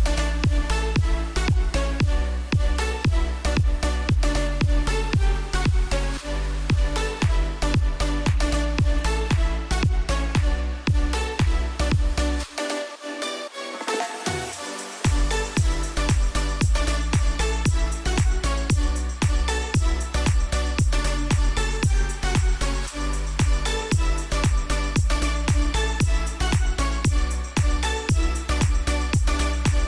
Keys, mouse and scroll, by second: 2.0 t, 2.2 click, 4.4-5.1 typing, 7.4 click, 13.0-24.5 drag, 24.5 Left, 28.9 Left.